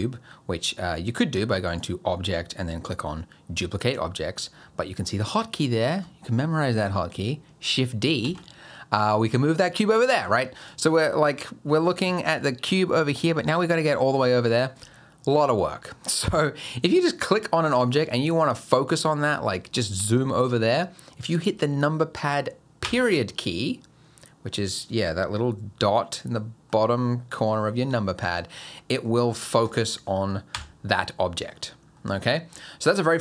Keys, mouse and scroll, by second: 1.7 click, 8.2 shift+d, 10.6 click, 11.0-12.0 scroll up 1, 12.1 shift+middle click, 12.5-12.9 scroll up 4, 13.0 shift+middle click, 16.1 click, 16.9 shift+middle click, 22.8 KP_Decimal, 24.5-24.8 scroll down 1, 26.0 middle click, 26.8-27.7 scroll down 2, 27.7 middle click, 27.9-28.8 scroll down 7, 28.8 middle click, 29.6 click, 30.5 KP_Decimal, 31.2 middle click, 31.5-32.0 scroll down 6, 32.0 middle click, 32.5-33.2 scroll down 2.